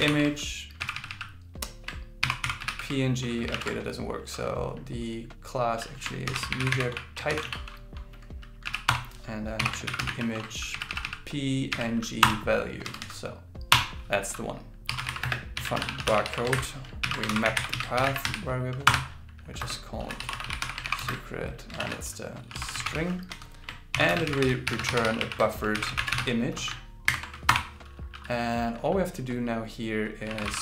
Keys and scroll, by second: 0.0-0.6 typing, 2.0-3.1 typing, 6.3 shift+m, 7.3 shift+t, 9.6-10.9 typing, 17.0 alt+l, 17.3 shift+p, 18.0 shift+v, 20.8 shift+., 21.0 shift+space, 21.8 shift+s, 23.9 shift+., 24.3 shift+b, 25.7 shift+i, 27.1 alt+8.